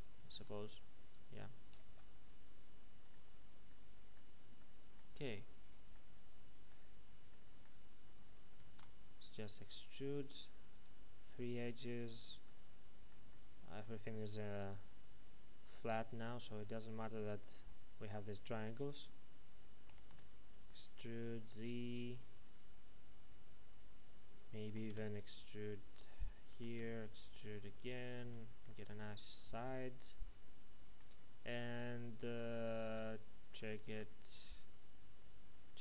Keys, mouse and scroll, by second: 0.3 Tab, 0.7-2.4 scroll up 1, 3.1 middle click, 5.0 Tab, 5.9 middle click, 6.9 scroll down 1, 7.6 shift+middle click, 8.7 ctrl+Tab, 9.1 click, 9.8 right click, 10.2 shift+right click, 12.4 middle click, 19.8 typing, 23.7 click, 24.6 typing, 26.3 click, 26.5 typing, 27.9 click, 28.1 Tab, 28.6 middle click, 31.1-31.5 scroll down 1, 31.5 middle click, 34.0 click.